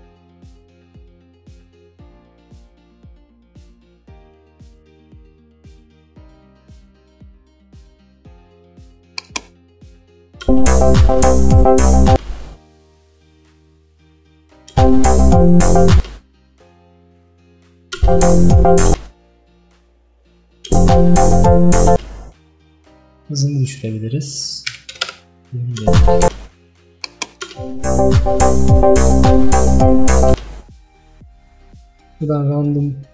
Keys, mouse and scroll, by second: 10.5 space, 12.2 space, 13.8-14.8 drag, 14.8 space, 16.1 space, 17.0-18.1 drag, 18.1 space, 19.0 space, 20.0 click, 20.8 space, 22.0 space, 25.1 click, 25.8 space, 26.3 space, 27.1 click, 27.5 space, 30.4 space.